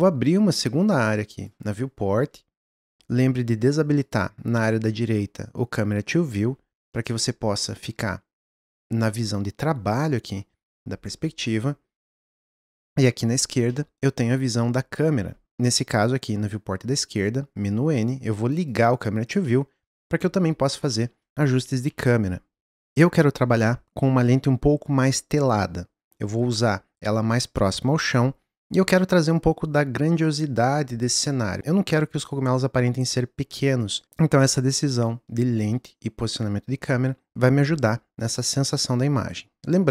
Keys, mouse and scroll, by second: 2.8 n, 4.0 click, 4.7 click, 6.5 n, 6.9-7.3 middle drag, 7.3 scroll down 2, 7.6-15.4 middle drag, 15.4 n, 18.7-19.5 drag, 19.5-22.1 middle drag, 22.1 n, 22.8 click.